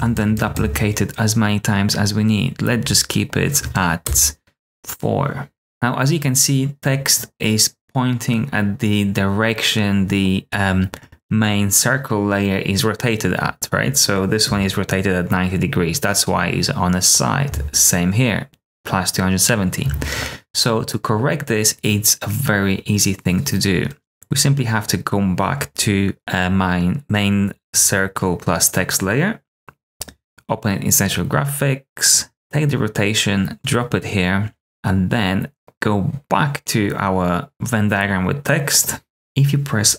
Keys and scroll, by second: 0.1 super+d, 4.0 BackSpace, 14.4 r, 17.4 r, 19.8 r, 32.3 r.